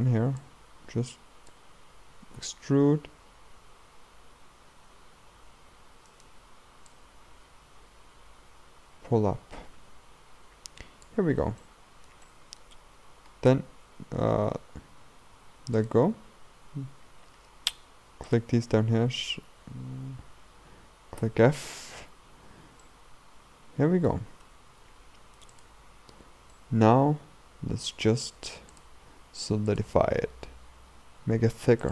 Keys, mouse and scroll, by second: 2.4 e, 6.9-10.0 drag, 11.6-15.8 shift+middle drag, 15.8-17.0 drag, 17.0-18.3 scroll up 2, 18.3 alt+click, 21.2 f, 21.8 scroll down 2, 22.4 scroll down 2, 22.9-24.5 middle drag, 24.5 Tab, 25.1 scroll up 2, 25.6-26.6 drag, 26.6-28.7 middle drag, 28.7 click, 29.7 click.